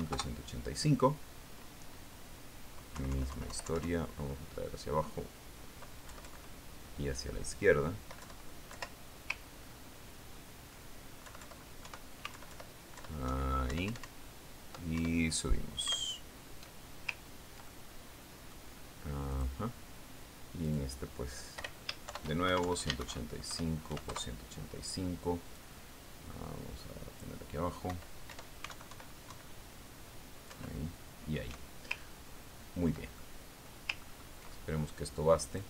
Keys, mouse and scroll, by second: 0.5-1.4 typing, 0.9 shift+Tab, 1.6 shift+KP_Enter, 4.5 Down, 7.6 Left, 11.1-11.6 ctrl+scroll up 2, 13.3 Right, 13.9 alt+Left, 14.8 alt+Right, 15.2 alt+Up, 17.4 alt+Up, 18.9 ctrl+scroll down 2, 19.1 ctrl+scroll up 2, 19.2 ctrl+click, 20.8 click, 22.1 click, 23.0 Home, 23.5 shift+End, 23.9-25.4 typing, 24.4 shift+Tab, 25.5 shift+KP_Enter, 27.0-28.8 drag, 29.3 Up, 30.2 alt+Right, 32.0 alt+Down, 33.8-34.4 ctrl+scroll down 2, 34.7 ctrl+middle click, 35.3-35.6 scroll up 3.